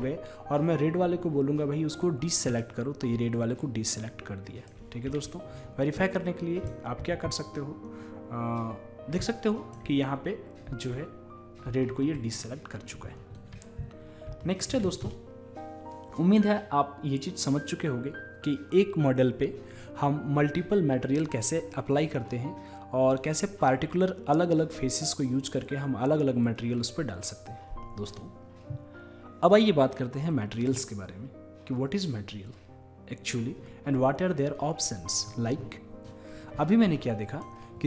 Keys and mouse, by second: 2.5-5.1 drag, 5.1 w, 6.0 click, 7.0 ctrl+z, 7.7 click, 9.3-11.1 drag, 12.4-13.4 middle drag, 13.4 Tab, 13.4-14.3 drag, 37.3-37.8 middle drag.